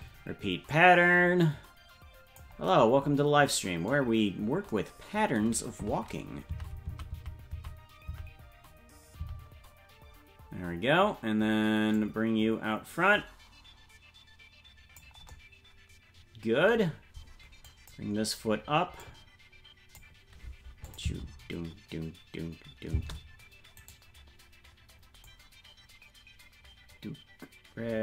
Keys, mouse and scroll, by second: 0.7-2.4 drag, 4.1-4.7 scroll down 5, 6.6 Right, 8.1 Right, 9.1 Right, 9.4 Right, 11.9-15.0 drag, 17.6 click, 19.0-20.0 drag, 20.8-23.1 drag, 21.0 space, 23.1 space, 23.9 right click, 25.2-28.0 drag.